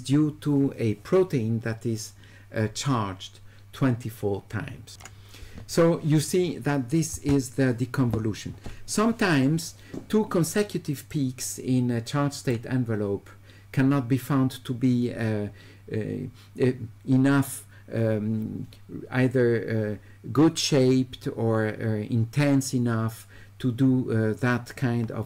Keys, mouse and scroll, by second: 4.9 click, 11.1 right click.